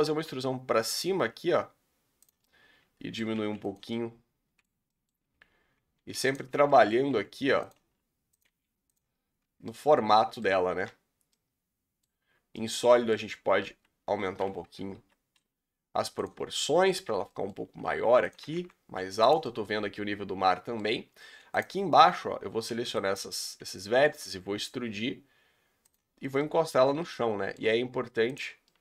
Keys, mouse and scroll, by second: 0.1 e, 1.3 s, 2.4 middle click, 3.4 r, 3.9-5.3 middle drag, 5.3-6.0 scroll up 2, 6.0 3, 6.3 click, 6.7 middle click, 7.1 r, 7.8 s, 8.5 g, 9.2 scroll down 3, 9.4 Tab, 9.7-10.5 middle drag, 10.5 z, 11.3-13.6 middle drag, 13.6 s, 14.6 Tab, 14.9 a, 15.3 s, 16.4 scroll down 1, 16.5 middle click, 17.0 scroll down 3, 17.2 middle click, 17.5 scroll up 3, 17.7 s, 18.3 s, 19.4-21.1 middle drag, 21.1-21.6 scroll up 2, 21.6 click, 23.1 b, 23.4 scroll down 1, 23.6 middle click, 24.2 e, 26.1 scroll down 2, 26.3 middle click, 27.0 scroll up 2, 27.1 middle click, 27.6 s, 28.5 scroll down 2, 28.6 middle click.